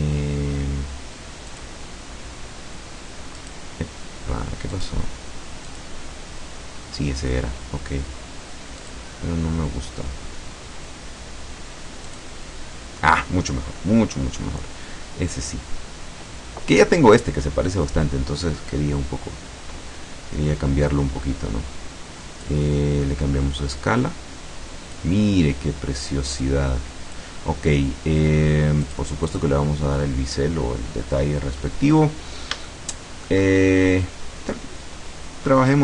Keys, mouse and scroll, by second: 1.6 click, 3.5 right click, 4.8 click, 5.8 click, 8.9 click, 12.1 click, 21.2-21.6 scroll up 1, 21.8 scroll down 1, 22.5-25.2 drag, 26.5 click, 28.9 click, 29.3 click, 31.3-31.9 scroll up 1, 31.9-32.7 scroll down 1, 32.7 shift+middle click, 33.5-34.1 shift+scroll up 1, 34.1-35.7 scroll down 1, 35.7-35.8 scroll up 1.